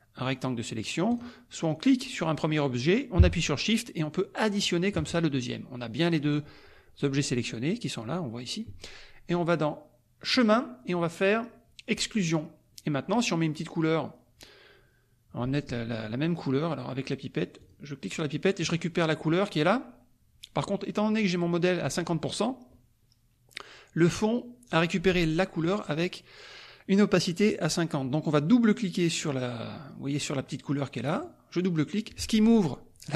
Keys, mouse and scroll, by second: 1.1 click, 1.9 click, 4.4 shift+click, 10.3 click, 12.3 click, 17.6 click, 18.6 click, 31.1 click.